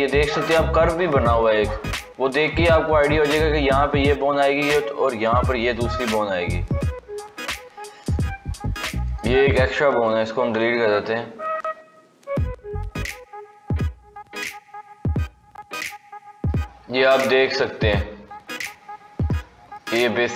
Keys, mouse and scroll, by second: 5.2 click, 5.8 g, 8.9 click, 10.3 x, 11.5-13.5 middle drag, 13.5 KP_3, 19.3-20.3 shift+middle drag.